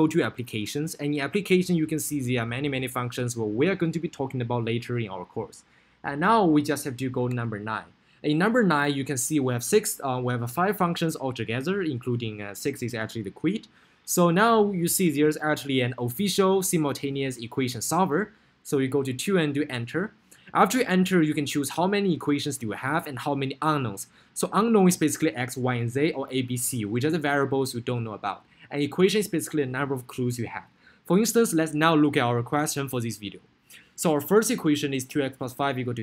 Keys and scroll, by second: 2.0 Down, 6.4 Up, 7.7 9, 16.5 Down, 19.8 Return.